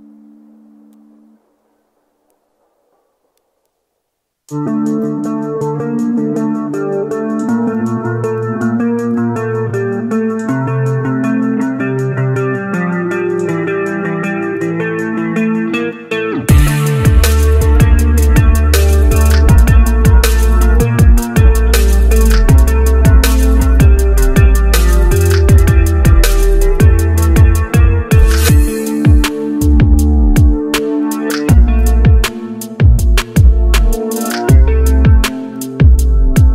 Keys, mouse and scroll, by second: 0.2 ctrl+z, 6.5 double click, 10.0-11.9 scroll up 1, 11.9-12.7 scroll down 1, 12.7 scroll down 1, 12.8-13.7 scroll up 1, 13.7-14.8 scroll down 1, 14.8-16.0 scroll up 1, 16.0-16.6 scroll down 1, 23.4-24.1 scroll down 1, 24.1 scroll up 1, 24.5 ctrl+z, 26.3 ctrl+z, 28.2 shift+right click, 29.5-30.1 scroll down 1, 30.1-30.9 scroll up 1, 31.2 right click, 34.6 right click.